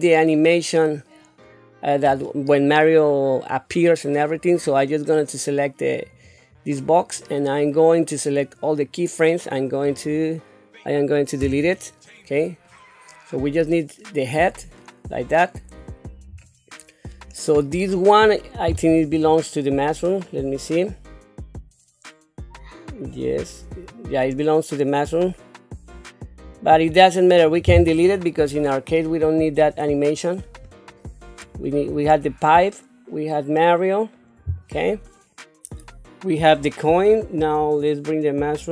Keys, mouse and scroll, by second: 6.0 click, 6.2 click, 8.3-9.8 drag, 11.4 Delete, 13.5-15.7 drag, 16.3-16.7 scroll down 2, 17.3-18.3 middle drag, 19.5-20.5 shift+middle drag, 21.7-26.7 drag, 27.3 click, 28.4 Delete, 29.5 click, 30.5 Delete, 32.2-34.1 shift+middle drag.